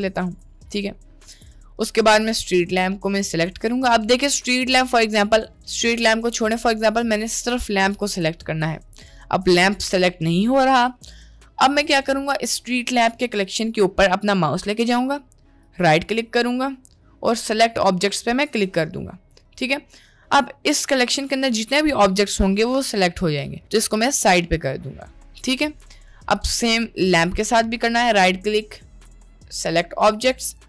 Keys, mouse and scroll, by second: 2.9 click, 3.1-4.1 drag, 6.5-7.1 middle drag, 7.9 click, 8.9 click, 9.5-10.3 drag, 10.8 click, 11.7 middle click, 15.6-18.8 right drag, 24.0 g, 27.7-30.6 drag.